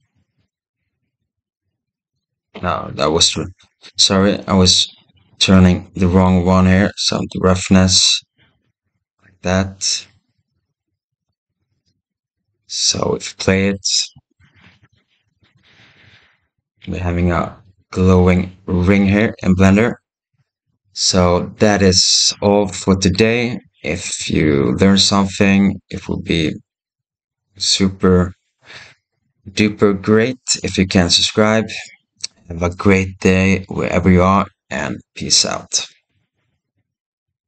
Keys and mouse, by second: 2.2-4.5 right drag, 5.4 right click, 7.3-11.2 right drag, 13.4 shift+middle click, 13.5-14.2 shift+drag, 14.0 right click, 15.1 space, 18.9 click.